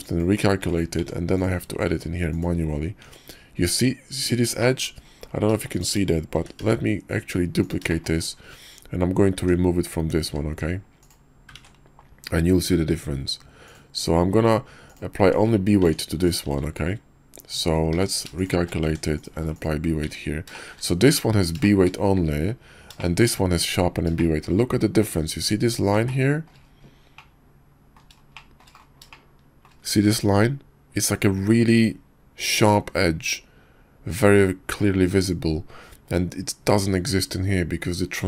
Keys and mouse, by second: 1.0 Tab, 1.3 click, 1.9 q, 3.0 Tab, 4.6 click, 5.7 click, 6.3 shift+d, 9.4 Tab, 10.2 q, 11.6 ctrl+`, 15.2 Tab, 15.8 Tab, 16.2 click, 16.5 q, 17.5 Tab, 17.9 q, 18.8 Tab, 19.2 click, 19.3 q, 20.1 Tab, 20.5 shift+click, 21.6 shift+click, 23.0 shift+click, 24.2 shift+click, 26.1-26.5 shift+drag, 27.1-28.0 drag, 28.3 shift+drag, 29.1-29.7 shift+drag.